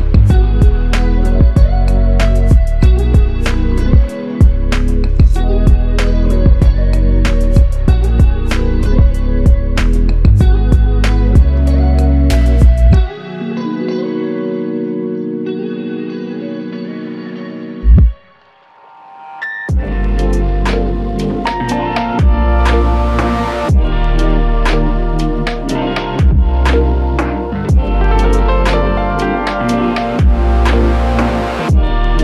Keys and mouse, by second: 2.0 f, 5.3 double click, 7.0 alt+click, 10.2 ctrl+alt+click, 10.7 ctrl+alt+click, 11.1 alt+shift+click, 12.3 alt+click, 15.5 f, 17.0 alt+click, 19.2 alt+click, 24.5 double click, 24.9 alt+click, 27.9 double click, 30.0 g, 30.8 alt+click.